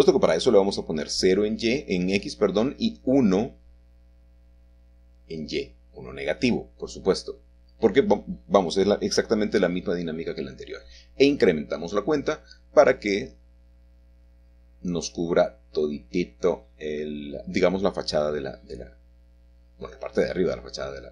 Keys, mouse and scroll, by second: 1.0 click, 4.9 1, 7.0-8.6 drag, 8.8 Home, 13.0 click, 13.6 click, 14.3 click, 15.1 shift+click, 15.3 shift+middle click, 16.8-18.3 shift+middle drag, 19.2 s.